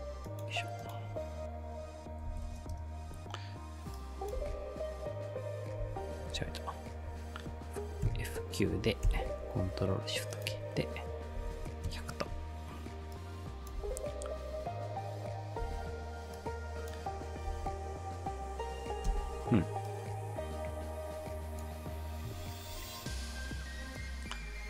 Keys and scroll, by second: 2.1-3.0 typing, 4.4 space, 5.8 space, 6.3 ctrl+z, 8.0 F9, 9.0 ctrl+shift+k, 11.1-12.1 typing, 13.8 space, 15.6 space, 17.5 space, 19.1 space.